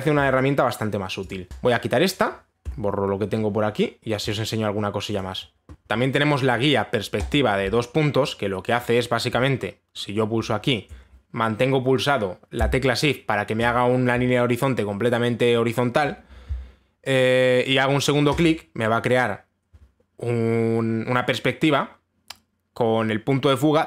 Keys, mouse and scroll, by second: 1.5 click, 2.1 click, 3.3 Delete, 4.9 click, 7.9 click, 9.4 click, 19.0 shift+click.